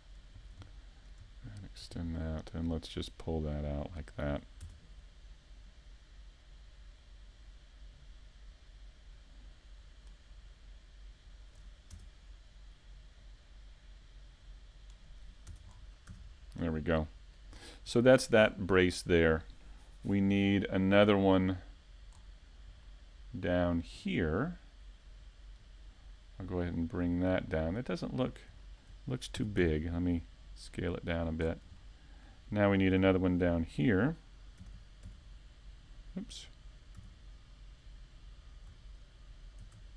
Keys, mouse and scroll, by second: 0.1-0.5 scroll down 4, 0.5 shift+middle click, 0.9-1.5 scroll up 4, 1.2 shift+middle click, 2.0 right click, 2.4 shift+middle click, 3.4 click, 6.1-6.7 scroll down 2, 6.4 a, 6.8 shift+middle click, 7.3-7.6 scroll down 1, 7.6 middle click, 8.1 scroll down 2, 8.4 middle click, 11.4 shift+right click, 11.8 middle click, 13.9-14.3 scroll up 2, 14.3 shift+middle click, 17.5 KP_7, 18.8 KP_5, 19.5 z, 20.0 shift+middle click, 20.5-20.9 scroll up 3, 20.9 shift+middle click, 21.3 scroll up 1, 22.2 shift+d, 25.3 click, 25.7 z, 26.4 a, 27.4 KP_5, 27.8 middle click, 28.3-28.8 scroll down 3, 28.9-29.5 scroll down 4, 28.9 z, 29.5 a, 29.9 middle click, 30.6-31.4 scroll up 3, 31.0 middle click, 31.6 scroll down 4, 31.9 shift+middle click, 32.3-32.6 scroll up 2, 32.5 middle click, 33.6-34.4 scroll up 2, 33.8 shift+middle click, 35.0 shift+middle click, 35.4 middle click, 36.0 shift+middle click, 37.0 right click, 37.9 shift+right click, 38.8 KP_7, 39.7 KP_5.